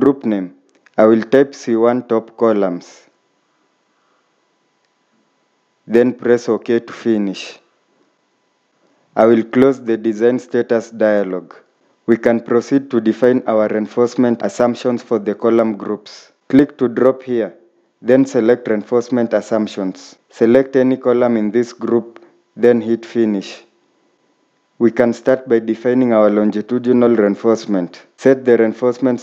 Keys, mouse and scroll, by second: 0.7-1.5 typing, 2.7-4.7 typing.